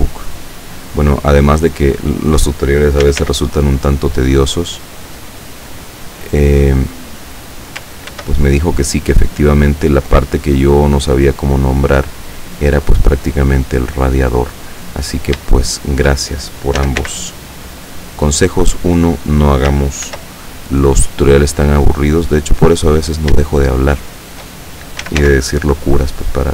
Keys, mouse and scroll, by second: 0.3-2.4 drag, 3.1 s, 3.3 x, 6.4 click, 8.2 ctrl+r, 8.6 ctrl+click, 9.1 ctrl+click, 10.6 click, 12.3 right click, 13.2-14.6 drag, 15.0 right click, 15.8 shift+right click, 16.8 s, 17.0 x, 19.1 click, 20.1 ctrl+r, 20.6 ctrl+click, 22.2 click, 23.0 right click, 23.9 shift+right click, 25.1 s, 25.3 x.